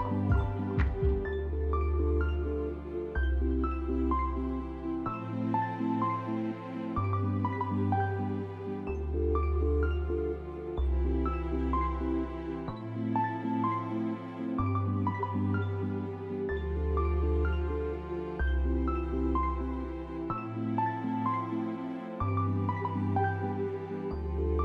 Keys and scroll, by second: 9.2 F4, 12.3 s, 22.4 F4, 23.1 F4, 23.4 s, 24.2 F4.